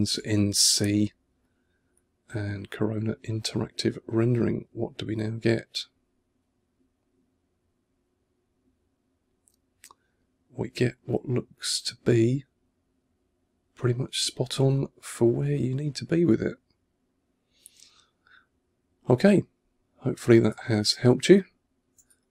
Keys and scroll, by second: 20.4 2, 21.9 1.